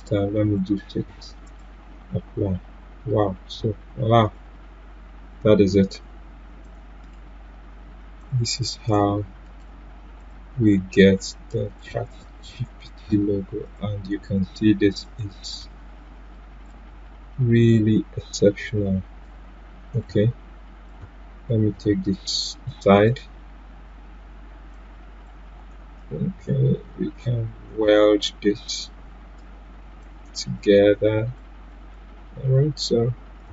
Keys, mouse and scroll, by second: 0.4 6, 1.4 click, 4.2 click, 4.2 click, 7.0 right click, 8.2-19.2 drag, 19.2-22.6 drag, 24.0 Delete, 24.7-33.5 drag.